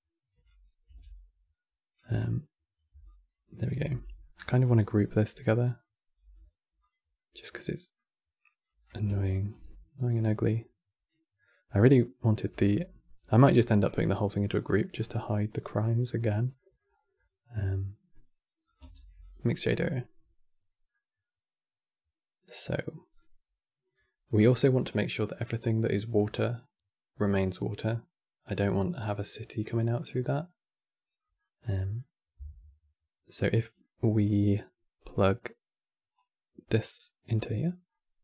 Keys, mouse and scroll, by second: 0.5 g, 2.7 alt+click, 3.5 x, 3.9-4.3 middle drag, 4.3-4.7 scroll up 6, 4.7 click, 5.9 g, 6.8-8.1 middle drag, 8.1 click, 8.5-9.0 scroll down 2, 9.0-10.3 shift+right drag, 12.2 g, 13.7 scroll down 2, 13.8 middle click, 14.7 scroll down 5, 14.8-16.0 middle drag, 16.0 scroll up 1, 16.2 middle click, 16.6-16.9 scroll up 4, 16.9-18.3 middle drag, 18.3 click, 18.6 shift+d, 21.5-22.8 middle drag, 22.8 click, 24.1 click, 28.9-31.3 middle drag, 31.3 scroll down 3, 31.5-35.9 middle drag, 35.9 click, 37.6-38.2 middle drag.